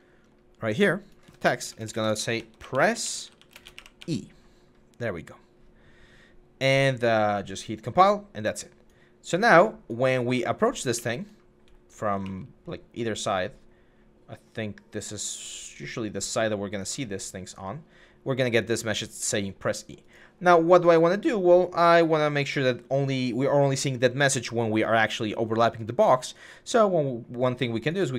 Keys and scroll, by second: 1.4-4.0 typing, 10.6-12.0 typing.